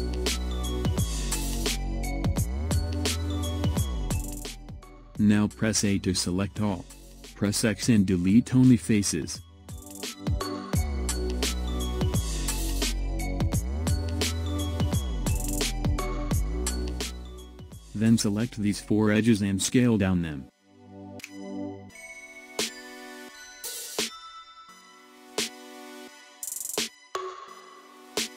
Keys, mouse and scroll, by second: 0.3-3.4 middle drag, 5.1 a, 7.6 x, 9.6-12.6 middle drag, 16.0 click, 17.4 click, 18.6 shift+click, 19.5 shift+click, 20.8 shift+click, 21.5-23.3 middle drag, 23.3 s.